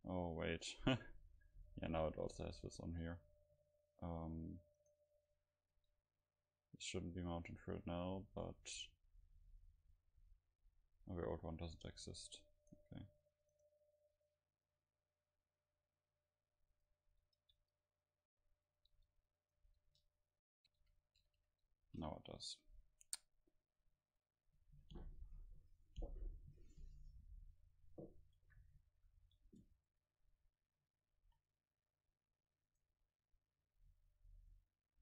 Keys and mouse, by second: 4.2-5.5 drag, 5.5 Tab, 6.1 Tab, 6.1 right click, 6.8-9.0 drag, 14.6-16.4 drag, 16.2-21.3 middle drag, 21.3 Delete, 21.3 a, 23.2 ctrl+s, 23.2 a, 24.4-26.3 middle drag, 29.0 a, 29.9 middle click, 29.9 a, 31.2 ctrl+s, 32.7-34.4 right drag.